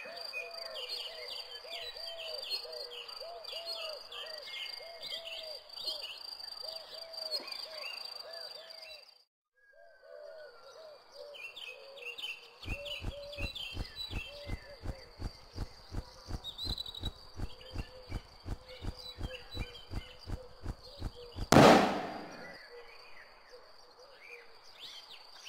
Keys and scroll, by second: 12.5 m, 17.2-17.9 typing, 21.4 q.